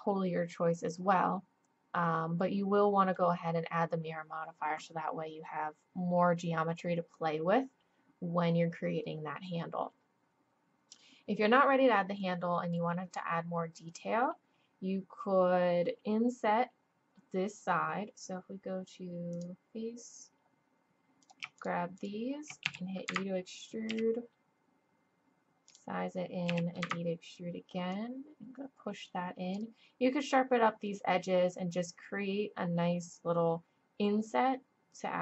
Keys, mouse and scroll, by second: 0.0-1.5 drag, 12.2-14.4 middle drag, 19.3-23.9 drag, 22.7 e, 23.9 s, 26.5 e, 27.9-29.9 drag, 32.6-34.7 middle drag, 34.7 click.